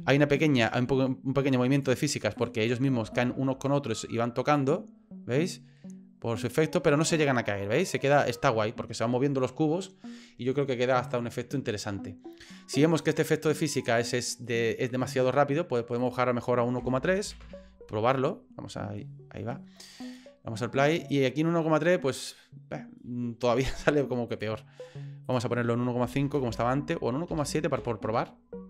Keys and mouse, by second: 0.1 shift+middle click, 0.6 middle click, 1.8 click, 3.2 shift+middle click, 4.5-6.5 drag, 6.5-7.9 middle drag, 13.0 click, 13.8 click, 14.6 middle click, 16.0-17.8 drag, 20.0 click, 23.6 click, 25.3-28.6 drag.